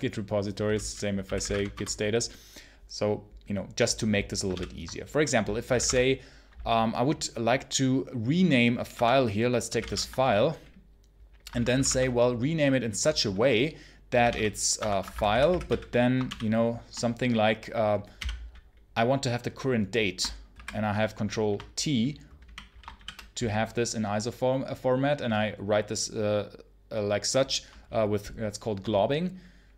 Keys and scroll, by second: 0.9-1.8 typing, 4.4 ctrl+l, 5.3-6.1 typing, 8.8 Tab, 9.3-10.2 typing, 11.4 ctrl+c, 11.6 ctrl+m, 11.6 v, 11.7 space, 13.7-16.1 typing, 14.7 Tab, 14.9 Escape, 18.0 ,, 20.4 ctrl+t, 22.8 shift+].